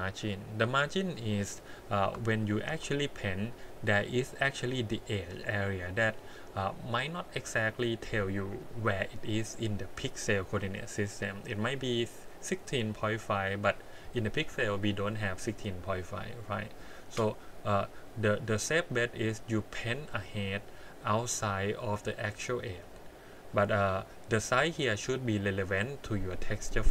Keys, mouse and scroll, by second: 2.0 Tab, 2.7 a, 3.5-5.1 scroll up 5, 17.3-19.3 scroll down 8, 19.8-20.2 scroll up 2, 20.2 middle click, 20.8 scroll up 2, 22.8-23.2 scroll down 3, 23.5 middle click, 24.0 scroll down 2, 25.0-25.6 scroll up 1, 25.6 middle click.